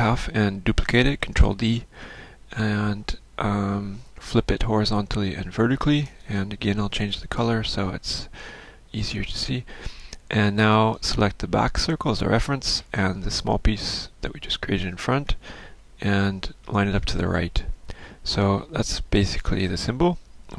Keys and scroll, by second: 3.4 ctrl+d, 7.1 ctrl+shift+f, 15.9 ctrl+shift+a.